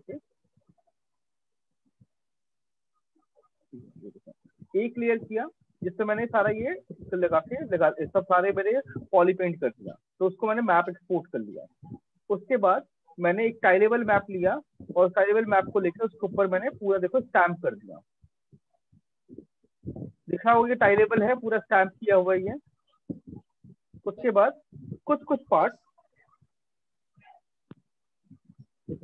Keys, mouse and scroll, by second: 0.8 click, 1.6 click, 2.4 click, 3.6 click, 4.6-5.0 click, 5.1-20.4 ctrl+click, 5.7 click, 9.4 click, 11.4 click, 12.2 click, 12.3 click, 12.4 click, 12.8 click, 12.8 click, 13.1-14.0 click, 14.1 click, 14.2 click, 15.0 click, 15.1 click, 15.2 click, 15.3 click, 15.4 click, 16.0 click, 17.0 click, 17.8 click, 18.6 click, 19.7 click, 21.1 click, 22.3 click, 22.8 click, 24.0 click, 25.6 ctrl+-, 25.9 ctrl+-, 26.3 ctrl+-, 26.4 ctrl+-, 26.8 ctrl+-, 26.9 ctrl+-, 27.6 click, 28.3 click.